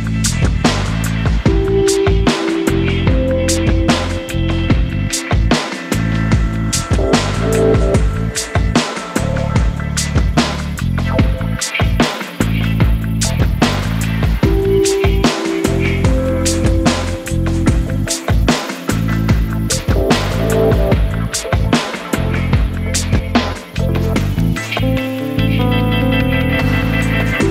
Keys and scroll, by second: 1.3 alt+e, 2.6 super+0, 3.4 super++, 3.5 super+space, 5.0 v, 6.0 e, 7.6 space, 9.0 space, 9.2 l, 12.4 super+v, 14.6 e, 18.7-21.2 typing, 23.2 v, 23.6 e, 25.1 super+0, 25.4 Tab.